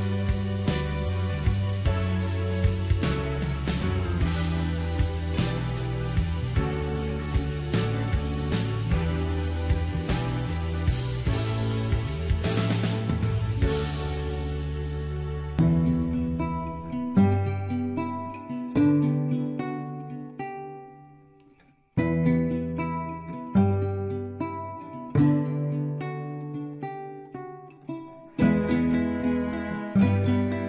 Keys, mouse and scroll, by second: 2.4-4.8 middle drag, 5.0 e, 6.8 KP_1, 7.5-9.0 shift+middle drag, 9.0 g, 11.2 r, 14.2-15.7 drag, 15.7 shift+z, 16.1 scroll down 1, 16.3 middle click, 17.1-17.4 scroll up 1, 17.4 ctrl+z, 18.2-19.5 middle drag, 19.5 ctrl+z, 19.7 ctrl+z, 20.3 middle click, 21.3 click, 22.7 x, 23.3 middle click, 24.0 click, 24.2 click, 24.3 click, 24.4 click, 24.6 alt+shift+click, 24.8 alt+shift+click, 25.0 scroll down 2, 25.0 middle click, 25.5 e, 25.8 middle click, 26.4 r, 27.0 e, 27.3 middle click, 27.6 r, 29.1 scroll down 1, 29.2 middle click, 30.0 click, 30.3 e.